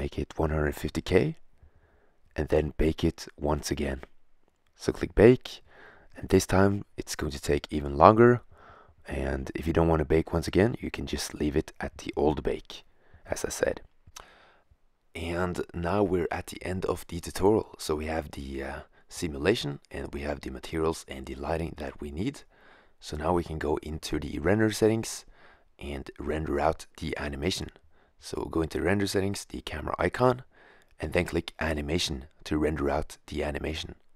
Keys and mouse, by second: 2.1-2.6 middle drag, 2.6 click, 4.5-12.3 drag, 13.6-14.2 drag, 16.5 click, 27.8 shift+z, 28.7 click, 34.1 click.